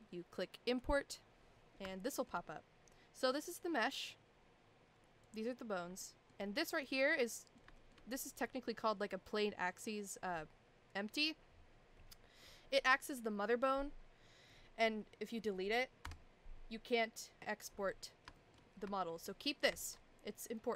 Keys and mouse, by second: 1.9-2.3 shift+middle drag, 3.3 click, 5.3 click, 6.0 shift+middle drag, 6.8 click, 7.2-7.6 middle drag, 7.7 shift+middle drag, 14.5-14.8 middle drag, 15.3 middle drag, 16.0 Delete, 18.3 shift+middle drag, 19.0 shift+middle drag, 19.7 ctrl+z, 20.6 middle drag.